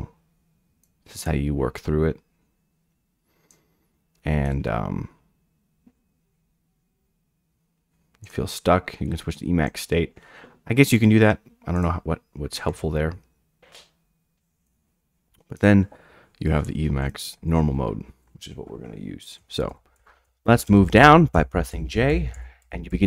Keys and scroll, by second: 19.4-22.9 typing.